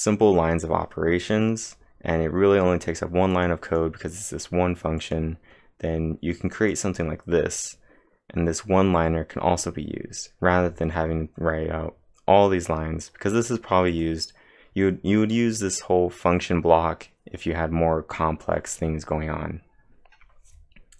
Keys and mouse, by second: 3.3 click, 3.3 typing, 3.7 click, 5.0 click, 13.1-13.9 typing, 13.4 click.